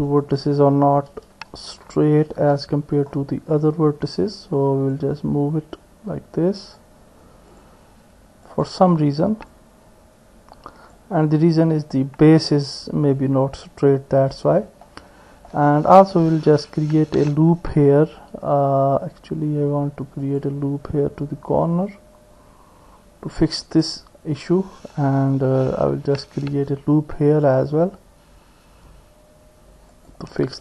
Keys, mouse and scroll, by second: 1.4 KP_1, 2.7 KP_3, 5.0-6.8 drag, 7.5 click, 9.6-11.0 drag, 11.6-12.6 drag, 11.6 middle click, 12.6 middle click, 14.8 click, 16.7 ctrl+r, 25.9 ctrl+r.